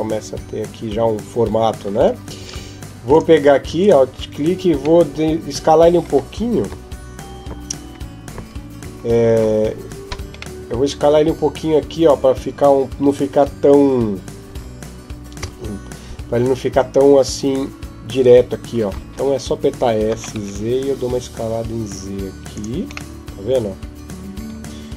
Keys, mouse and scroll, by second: 2.2 ctrl+Tab, 3.6 alt+right click, 4.8 middle click, 6.5 KP_5, 7.3 KP_5, 8.1 KP_3, 8.6 KP_1, 10.4 middle click, 14.3 KP_3, 15.2 KP_1, 19.9 s, 22.9 middle click.